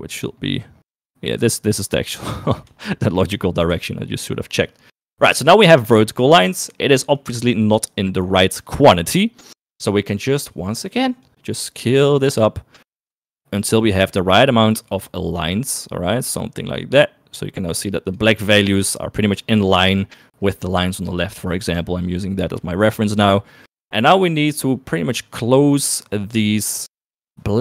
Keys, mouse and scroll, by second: 2.0 middle click, 3.8 shift+middle click, 5.3 shift+middle click, 6.8 shift+middle click, 9.4 shift+click, 11.4-18.3 shift+drag, 22.1 shift+middle click.